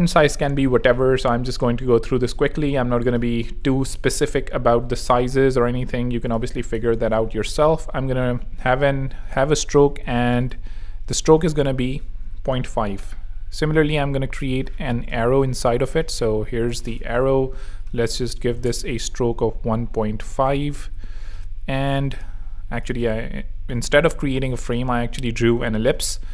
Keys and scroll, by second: 3.6 f, 4.1 Tab, 6.4-7.4 typing, 10.0 z, 10.6 super+z, 11.2 super+t, 11.7 Escape, 17.8-19.0 typing, 20.9 super+z, 21.2 super+x, 24.1 alt+super+g, 24.8 alt+super+v, 25.5 alt+super+v, 25.6 alt+super+h.